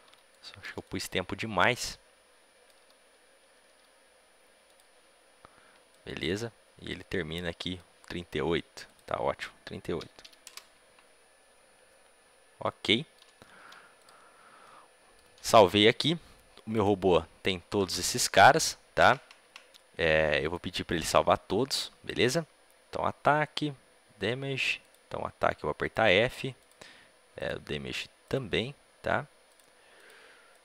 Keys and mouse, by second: 3.6 a, 3.6 b, 3.6 g, 5.8-12.5 drag, 12.5-15.1 middle drag, 14.5 ctrl+s, 27.3-30.6 drag.